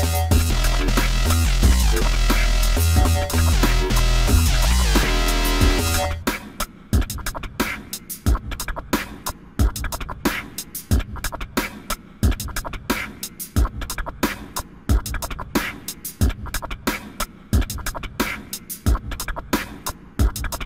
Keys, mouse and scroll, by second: 3.7 ctrl+z, 4.6 click, 11.1 ctrl+z, 12.5 click.